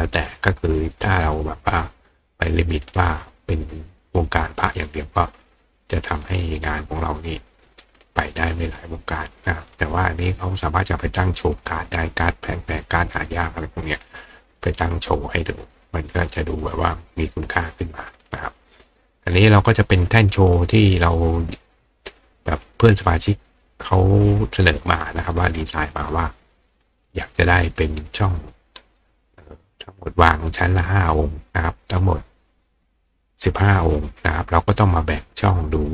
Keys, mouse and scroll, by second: 25.6 right click.